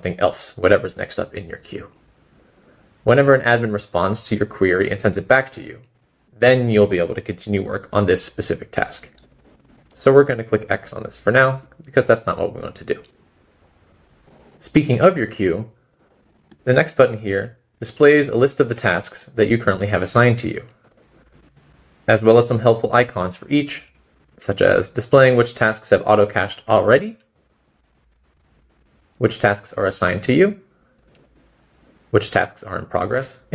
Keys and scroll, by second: 6.0 typing.